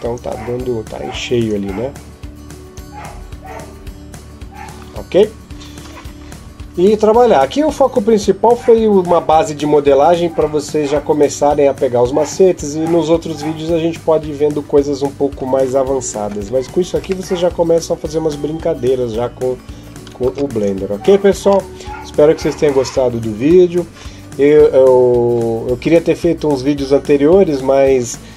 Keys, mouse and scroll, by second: 16.2 Escape, 16.9 scroll up 1, 17.1 middle click, 20.0 ctrl+s.